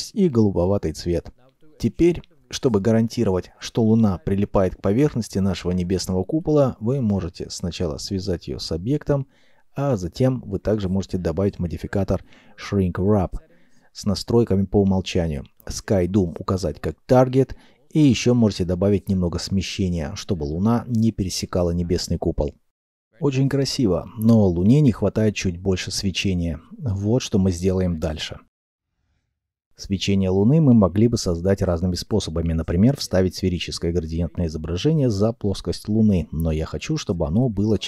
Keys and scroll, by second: 6.1 ctrl+p, 7.8 g, 8.7 Escape, 9.0 g, 9.6 Escape, 17.8 typing, 20.6 typing.